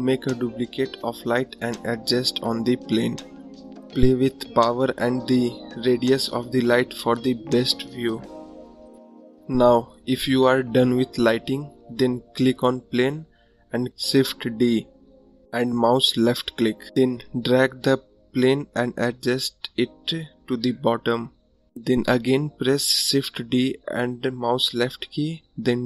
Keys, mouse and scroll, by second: 0.7 click, 2.2 click, 3.6 click, 4.3 click, 4.9 click, 6.3 click, 7.7 click, 9.1-10.2 drag, 10.6 click, 12.0 click, 12.7 click, 14.1 click, 14.8 click, 15.1 scroll down 4, 16.1 shift+d, 17.6 ctrl+click, 21.8 shift+d, 22.8 ctrl+click, 25.7 scroll up 2.